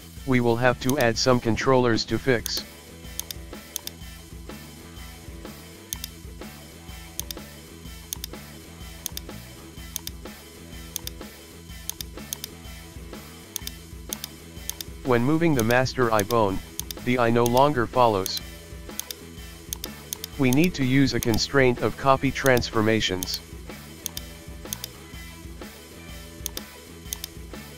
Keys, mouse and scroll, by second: 0.9 right click, 2.4 click, 3.2 shift+click, 3.8 right click, 4.3 g, 7.2 shift+click, 8.2 right click, 9.1 click, 10.0-11.5 drag, 11.9 click, 13.6 right click, 14.1 click, 14.7 click, 16.2 right click, 16.8 click, 17.5-21.3 drag, 21.3 right click, 21.9 g, 22.9 g, 24.1 click, 24.7 shift+click, 25.3 g, 27.1 click, 27.5 g.